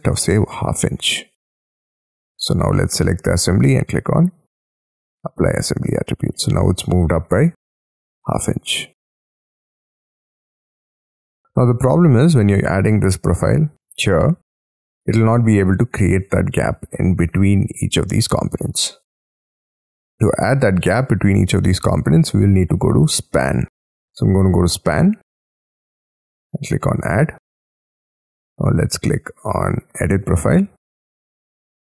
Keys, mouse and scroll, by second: 0.0-0.3 typing, 1.3 Tab, 2.4 double click, 6.3 middle click, 7.8-8.7 scroll down 11, 8.7 middle click, 10.4 middle click, 10.4-11.0 scroll up 11, 11.1 middle click, 11.7-15.0 scroll down 7, 16.3-17.4 scroll down 11, 25.5 middle click.